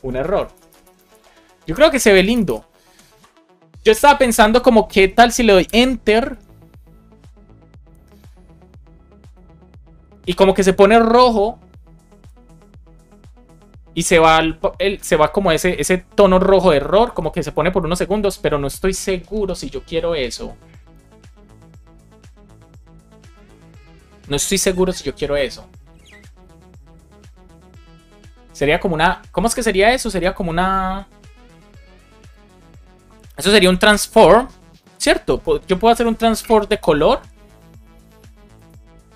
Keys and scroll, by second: 1.6 Return, 5.5 Return.